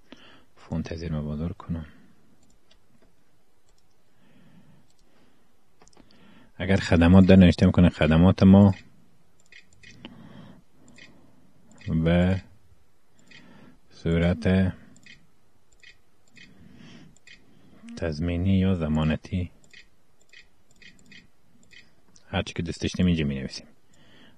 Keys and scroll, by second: 6.1-11.2 typing, 12.7-22.6 typing.